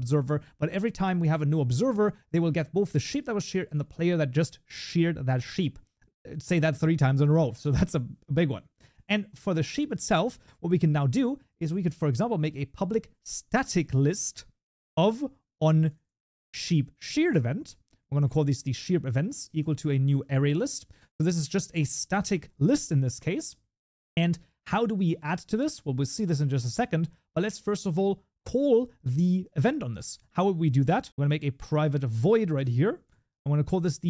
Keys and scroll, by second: 12.5 Tab, 14.5 Tab, 25.3 ctrl+s, 31.1 ctrl+BackSpace, 32.1 Tab.